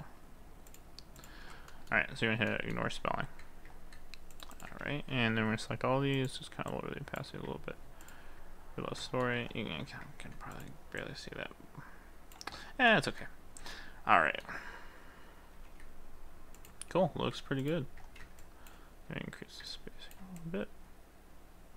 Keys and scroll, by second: 4.9 ctrl+a, 15.6 ctrl+s.